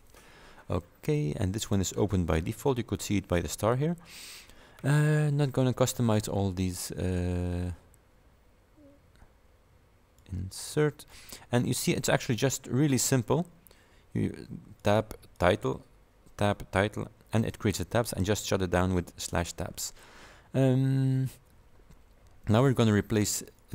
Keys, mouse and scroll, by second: 1.7 click, 10.3 click, 12.3 click, 12.7-13.1 scroll up 1, 14.9 click, 15.4 click, 16.5 click, 17.1-17.7 scroll down 1, 18.6 click, 19.5 click, 20.9 scroll up 2, 23.6 click.